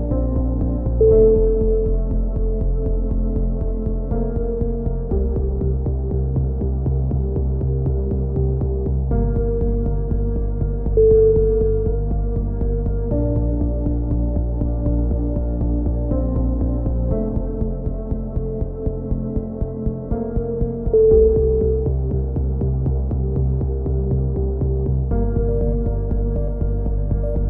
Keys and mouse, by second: 0.5 click, 2.2 click, 2.8 click, 3.4 click, 10.1 right click, 10.4 g, 13.0 right click, 13.1 z, 13.3-14.6 drag, 14.8 KP_7, 15.0 z, 15.3 click, 15.5 a, 15.9 right click, 16.6 KP_3, 17.1 right click, 17.7 shift+q, 17.9 a, 17.9 z, 18.2 z, 18.9 right click, 19.1 click, 20.0 right click, 20.2-21.2 drag, 20.5-23.0 typing, 21.5 ctrl+n, 21.8-23.1 drag, 24.0 click, 24.6 right click, 25.1 click, 25.6 a, 26.5 right click, 26.9 e, 27.1 click.